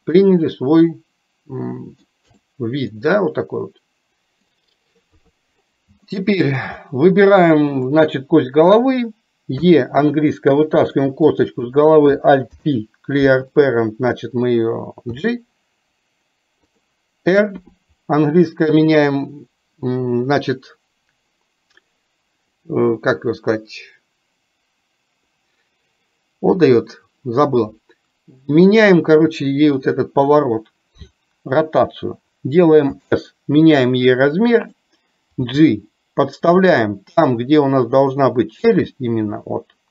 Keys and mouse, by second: 0.2-2.2 middle drag, 2.3 click, 2.9-4.5 middle drag, 6.2 shift+middle click, 7.9 click.